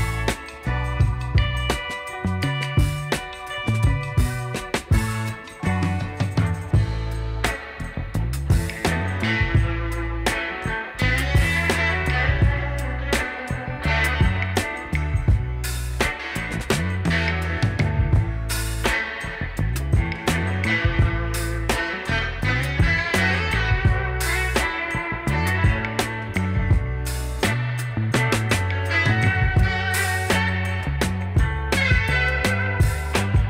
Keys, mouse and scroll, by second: 1.7 alt+shift+click.